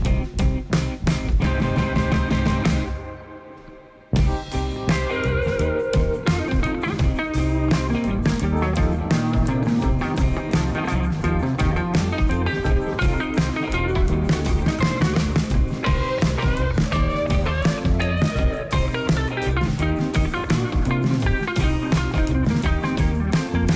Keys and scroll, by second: 10.8 i, 14.2 ctrl++, 17.2 g, 17.7 z, 21.5 Tab.